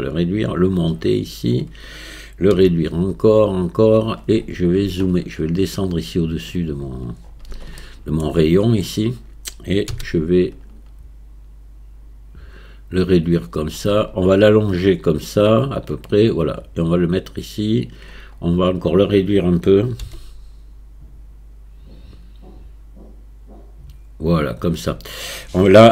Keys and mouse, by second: 0.9 click, 2.6 s, 5.7 click, 7.8-8.3 shift+drag, 9.9 s, 14.5-15.8 drag, 16.7-17.9 drag, 20.0 s.